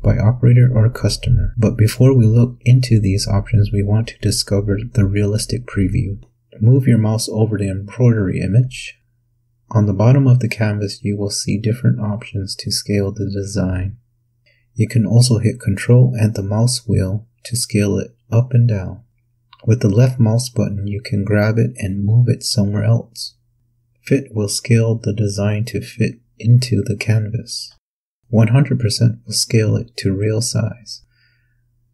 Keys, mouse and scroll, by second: 5.5-6.4 scroll down 2, 18.2-18.9 ctrl+scroll down 2, 18.9-19.6 ctrl+scroll down 4, 19.9-20.2 ctrl+scroll up 2, 22.1-22.8 ctrl+scroll down 4, 23.3 ctrl+click, 24.9-26.1 drag, 27.4 click, 30.1 click.